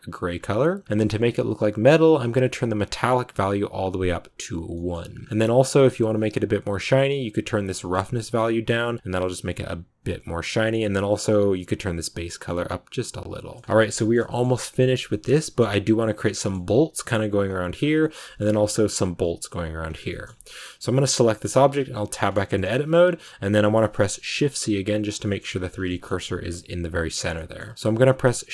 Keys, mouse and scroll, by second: 2.3-4.6 drag, 4.6 middle click, 5.1 scroll up 2, 5.3-7.3 middle drag, 7.3-11.3 drag, 13.4 scroll down 3, 13.5 middle click, 13.6 ctrl+s, 13.8 shift+middle click, 14.1-15.0 scroll up 1, 15.0 middle click, 15.2 scroll down 1, 15.3-17.3 middle drag, 17.3-17.7 scroll up 1, 17.7 scroll down 1, 17.9 shift+middle click, 18.3-19.8 scroll up 1, 19.8 scroll down 3, 20.0 shift+middle click, 20.5 right click, 21.2 shift+middle click, 21.6 Tab, 22.1 middle click, 22.7 a, 23.0-23.4 scroll down 1, 23.4 click, 24.2 shift+c, 25.1 shift+middle click, 25.3-27.2 scroll up 3, 25.7 shift+middle click, 27.2 shift+middle click, 27.6-28.5 scroll up 2.